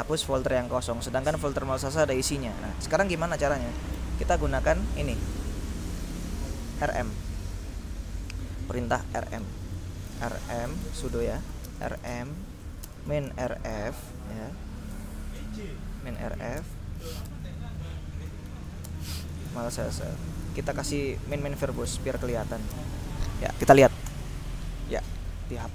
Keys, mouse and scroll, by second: 2.1-3.2 drag, 4.0 ctrl+l, 5.4 click, 6.7 click, 7.7 click, 8.2 click, 10.1-15.0 typing, 16.2-20.8 typing, 21.5 ctrl+-, 21.7 ctrl+v, 21.9 ctrl+r, 22.3 ctrl+b, 22.5 ctrl+o, 22.7 ctrl+s, 22.8 ctrl+e, 22.9 ctrl+space, 24.1 Return.